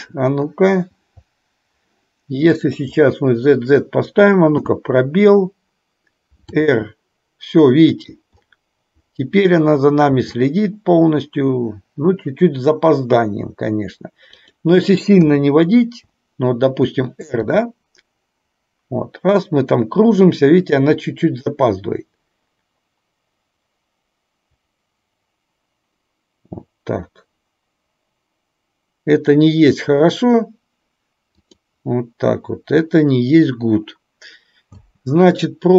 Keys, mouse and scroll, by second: 0.9 v, 2.6 click, 4.6 space, 6.6 r, 10.2 r, 15.3 KP_0, 17.6 r, 34.8 space.